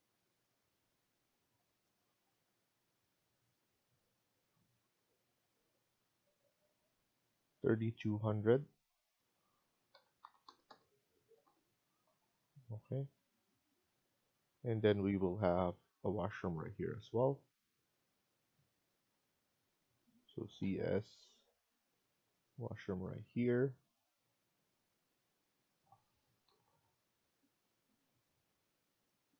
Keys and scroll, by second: 2.0 Escape, 2.2 Escape, 5.8 Escape, 7.2 F1, 9.8-11.1 typing, 11.3 Return, 24.6-25.3 typing, 26.4 Down.